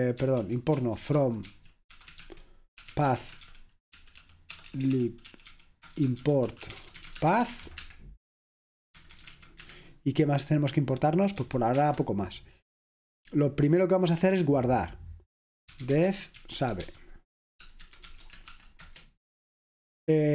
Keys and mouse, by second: 0.4 ctrl+w, 0.8 ctrl+w, 1.0-11.5 typing, 11.8 Return, 15.5-19.0 typing.